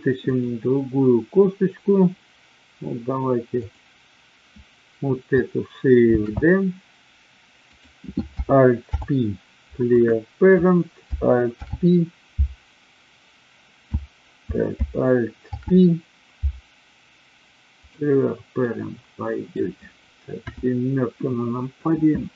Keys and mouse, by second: 0.2 click, 3.5 click, 6.1 shift+d, 8.9 alt+p, 11.5 alt+p, 15.4 alt+p, 18.6-19.6 middle drag, 20.4 KP_7.